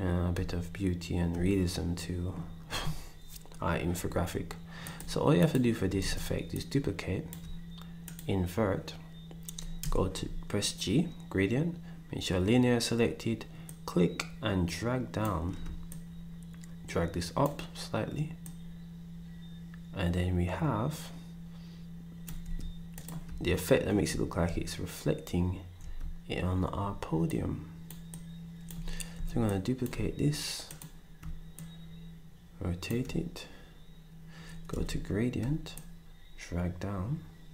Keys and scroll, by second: 6.0 ctrl+d, 9.8 g, 22.4 s, 29.1 d, 34.7 g.